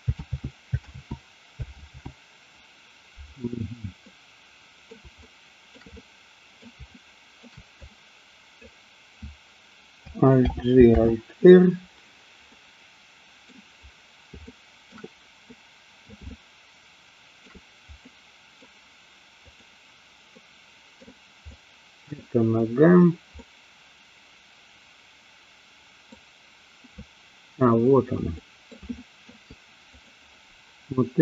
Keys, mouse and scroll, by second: 0.4 ctrl+z, 1.0 ctrl+z, 1.9 ctrl+z, 4.0-5.0 middle drag, 5.2 shift+middle click, 5.9 middle click, 6.9 shift+middle click, 7.7 click, 10.4 alt+g, 10.9 alt+r, 12.5-13.5 middle drag, 14.5 shift+middle click, 15.5 middle click, 16.4-17.5 shift+middle drag, 18.0-18.7 middle drag, 19.4 click, 20.4-21.1 middle drag, 21.5-22.1 middle drag, 23.4-26.1 middle drag, 28.4 middle click, 29.0 shift+middle click, 29.9 click.